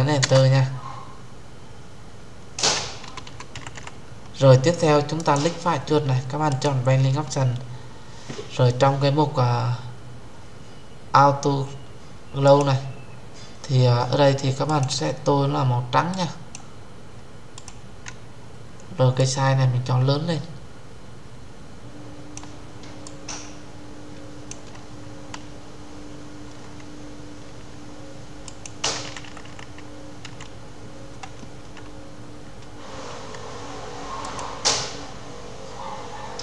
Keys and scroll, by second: 0.1 Return.